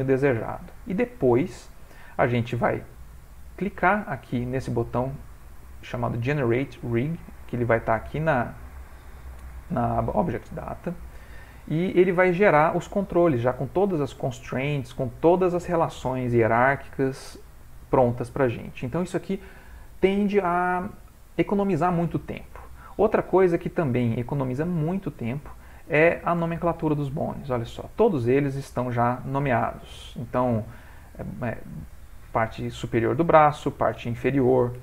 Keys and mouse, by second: 3.9 click, 4.4 middle click, 4.5 middle click, 23.2 middle click, 23.7 middle click, 23.7 middle click, 24.2 ctrl+middle click, 24.3 ctrl+middle click, 24.9 shift+middle click, 25.0 shift+middle click, 25.6 ctrl+middle click, 26.5 Tab, 27.2 click, 33.7 click.